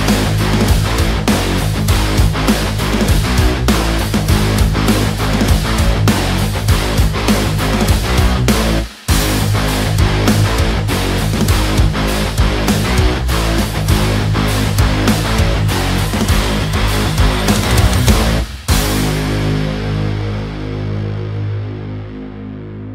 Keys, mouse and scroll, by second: 1.1-2.7 drag, 2.7-6.5 shift+drag, 8.0 b, 8.8 click, 15.1 right click, 15.1 click, 16.7 right click, 19.5 click, 22.0-22.9 drag.